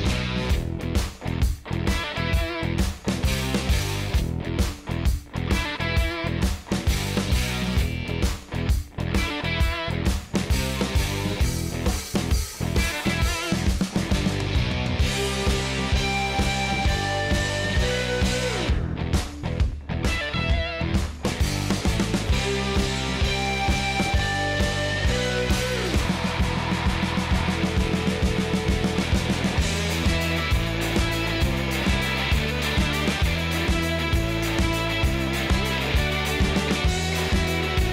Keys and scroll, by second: 1.4 space, 23.2 5.